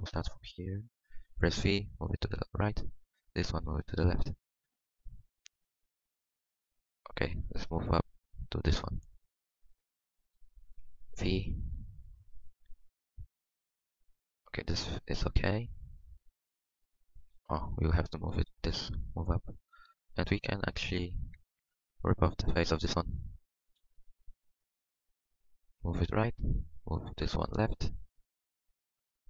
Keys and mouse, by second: 0.8-2.6 drag, 1.6 v, 3.6 click, 3.6 g, 5.6-7.1 middle drag, 11.1 v, 12.7 g, 13.4 click, 14.8 click, 17.0-18.9 drag, 18.3 g, 18.9 middle click, 20.5 middle click, 23.7 click, 24.4 v, 26.5 click, 26.5 g, 27.1 click.